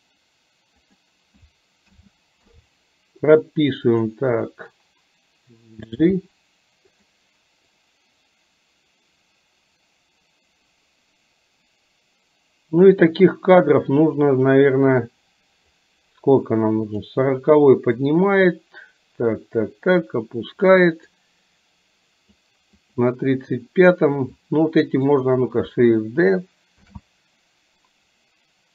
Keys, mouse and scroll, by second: 1.9 a, 2.5 i, 6.3 g, 7.9-13.0 drag, 15.2-15.8 drag, 17.0 click, 18.2-20.8 drag, 21.2-22.4 drag, 23.0 click, 24.4-25.3 drag, 26.9 shift+d.